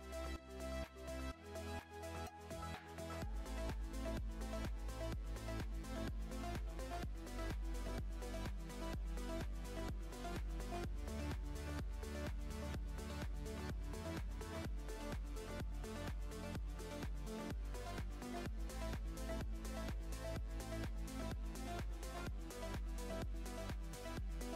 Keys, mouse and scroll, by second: 1.4-7.2 drag, 12.0-13.6 drag, 13.6-16.7 middle drag, 16.7-18.5 drag, 18.5-18.9 scroll down 2, 18.9-21.4 shift+middle drag, 21.4-21.9 scroll up 2, 22.4 click, 22.9-23.6 shift+middle drag, 23.6 scroll up 2, 24.0-24.5 middle drag.